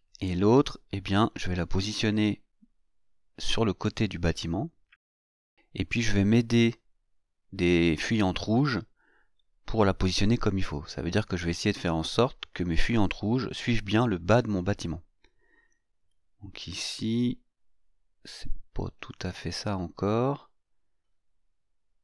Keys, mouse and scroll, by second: 0.5 scroll down 2, 3.7-7.1 drag, 9.1-22.0 drag.